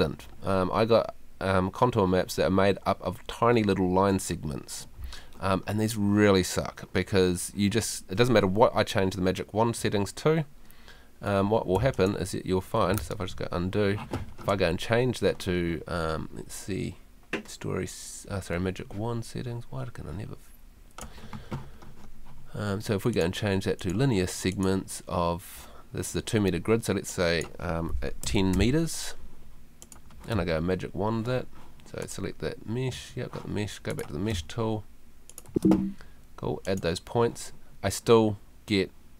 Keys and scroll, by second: 11.4 Escape, 28.2 i, 30.3 space, 32.9 Escape, 34.3 space.